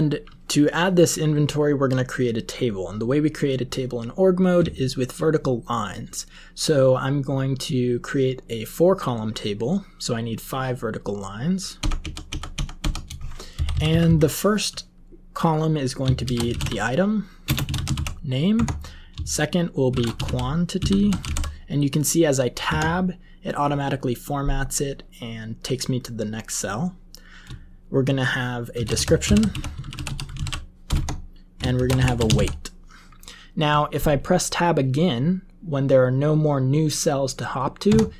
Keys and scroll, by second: 11.9-14.0 typing, 16.1-21.9 typing, 22.6 Tab, 28.4-32.8 typing, 37.8 Tab.